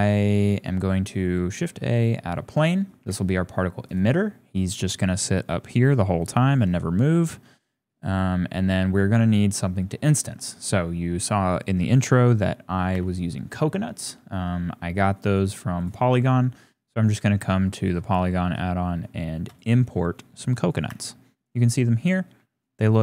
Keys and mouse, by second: 3.0-4.4 typing, 4.2 click, 6.4-6.9 shift+drag, 6.9 middle click, 7.3 shift+click, 9.1-9.5 shift+drag, 9.8 click, 10.5 shift+click, 12.9 n, 19.5 click, 20.9 n, 22.3 g.